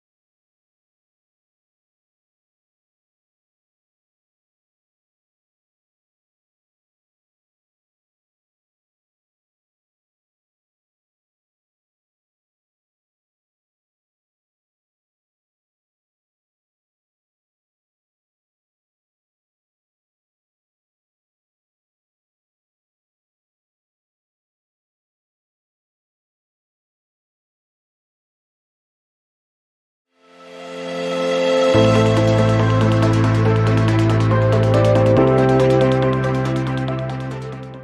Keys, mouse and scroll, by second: 0.3 ctrl+z, 0.4-8.6 drag, 12.1-19.2 drag, 21.3 click, 25.5 click, 27.5 alt+scroll down 1, 27.6 alt+scroll up 1.